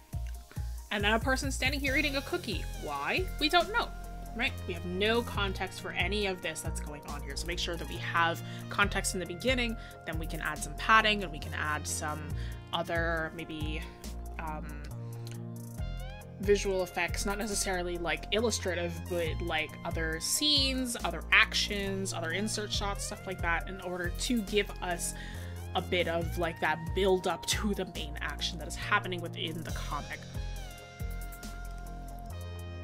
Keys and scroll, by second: 1.2-1.8 scroll up 1.